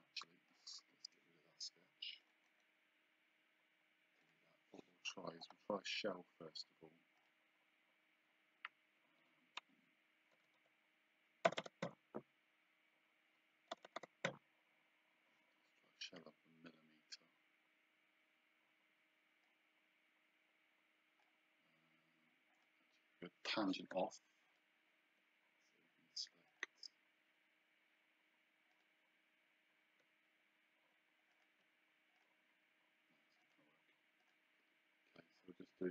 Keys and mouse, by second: 0.5 click, 2.3 click, 2.5 right click, 4.2 click, 5.4 click, 7.2 click, 9.6 KP_Subtract, 11.8 KP_1, 13.7 BackSpace, 14.3 KP_1, 19.5 click, 22.6 click, 24.5 click, 26.5 click, 28.7 click, 31.3 click, 33.5 click, 35.3 click.